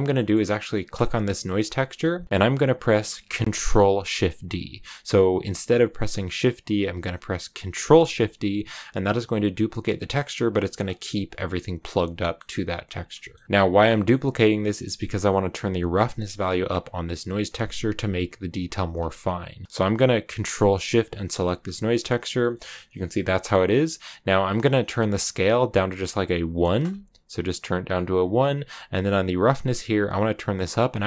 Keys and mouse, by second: 0.1 click, 0.8 click, 1.6 middle click, 7.8 ctrl+shift+d, 10.7 click, 12.2 middle click, 12.7 click, 13.1 middle click, 13.8 middle click, 16.7 click, 17.1 click, 21.0 ctrl+shift+click, 22.5 middle click, 25.1-26.7 drag, 29.6-30.8 drag.